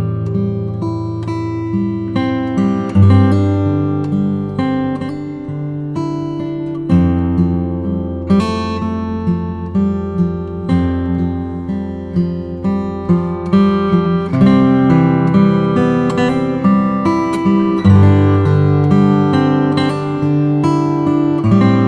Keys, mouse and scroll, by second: 0.0-0.6 typing, 0.2 click, 3.0 click, 4.2 space, 4.4 click, 4.8 space, 5.7 click, 7.8 space, 8.1 click, 8.4 space, 9.3 click, 10.1 space, 10.4 click, 10.7 space, 13.3 space, 15.7 click.